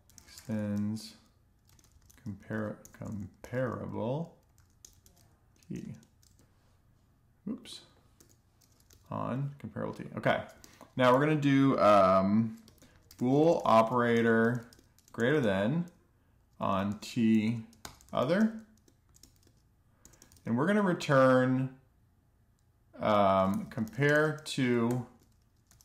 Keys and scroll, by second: 0.0-4.9 typing, 6.8-8.0 typing, 9.2 Tab, 11.2-13.7 typing, 15.2-18.8 typing, 21.8-25.8 typing.